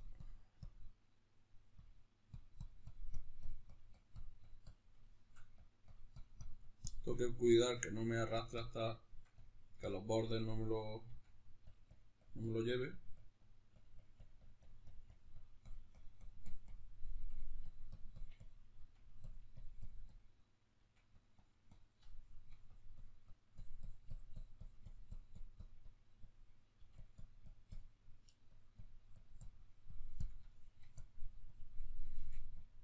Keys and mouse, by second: 4.8 shift+middle click, 5.3-8.7 drag, 8.7 shift+middle click, 9.1-11.5 drag, 10.8 f, 11.6-17.2 drag, 16.8 f, 17.4-18.8 drag, 18.5 f, 19.0-21.0 drag, 20.5 f, 21.1 click, 21.8 shift+middle click, 22.4-26.8 drag, 26.5 f, 26.9-30.2 drag, 30.2 shift+middle click, 30.7-32.4 drag, 31.9 f, 32.6-32.8 drag.